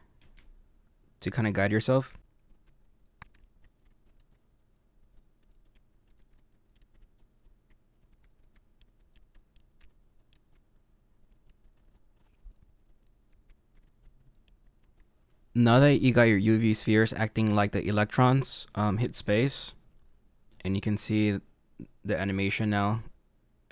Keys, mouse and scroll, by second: 0.2 g, 2.0-11.8 typing, 2.2 middle click, 2.5 middle click, 2.6 middle click, 2.7 scroll up 1, 3.2 middle click, 3.6 middle click, 4.1 shift+click, 4.2 right click, 4.4 click, 4.4 middle click, 4.8 middle click, 5.6 middle click, 5.9 middle click, 6.2 middle click, 6.4 middle click, 7.0 middle click, 7.3 middle click, 7.5 click, 8.2 click, 8.4 middle click, 8.6 shift+click, 8.7 right click, 8.8 click, 9.0 middle click, 9.1 scroll down 2, 9.2 middle click, 9.3 click, 9.6 middle click, 10.1 middle click, 10.1 scroll up 2, 10.2 shift+middle click, 10.5 middle click, 10.7 middle click, 11.1 middle click, 11.8 middle click, 12.0 shift+click, 12.2 click, 12.3 shift+click, 12.3 right click, 12.6 middle click, 12.6 middle click, 12.8 scroll down 3, 12.8 click, 12.9 middle click, 13.0-14.4 typing, 14.6 shift+click, 14.6 right click, 14.9 middle click, 15.8-19.3 middle drag, 19.3 space, 22.5-23.7 middle drag.